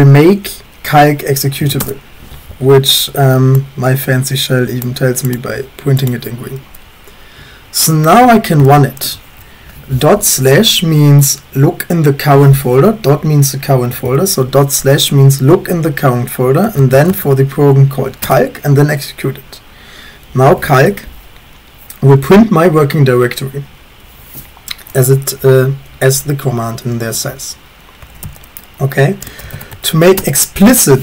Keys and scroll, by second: 1.4-2.1 typing, 8.1-9.0 typing, 13.2 Left, 13.2 Left, 13.7 Right, 13.9 Right, 14.0 Right, 16.5-17.4 typing, 18.3 Return, 27.9-31.0 typing, 30.2 Return.